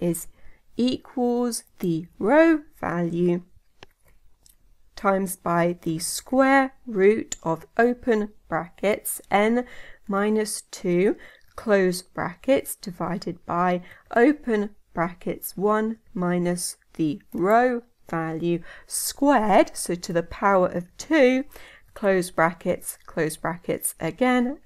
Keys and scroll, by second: 6.2 Tab.